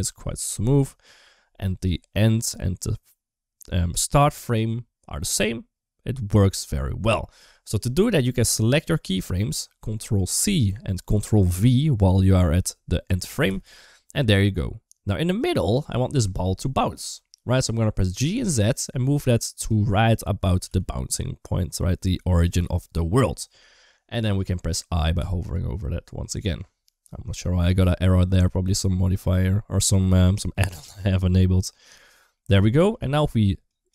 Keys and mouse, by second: 8.3 click, 10.2 ctrl+c, 13.3 ctrl+v, 15.2 click, 16.7 KP_1, 18.0 g, 20.4 g, 25.0 i, 28.6 middle click, 30.3 middle click, 32.1-32.7 middle drag, 33.5 click, 33.8 space.